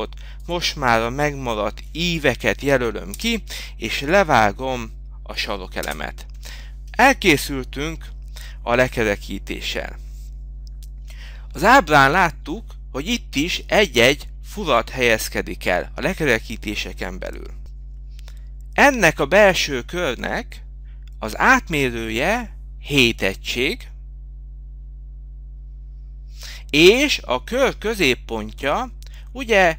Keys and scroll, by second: 10.4 k, 12.1 Return.